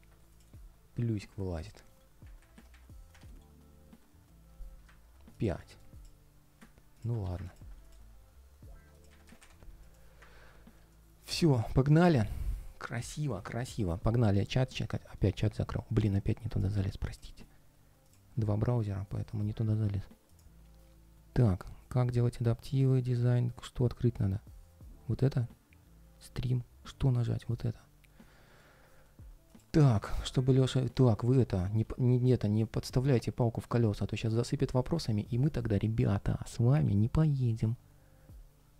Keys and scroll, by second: 1.6 ctrl+shift+3, 3.0 ctrl+shift+3, 11.2 ctrl+shift+4, 12.1 ctrl+shift+3, 13.0 ctrl+shift+3.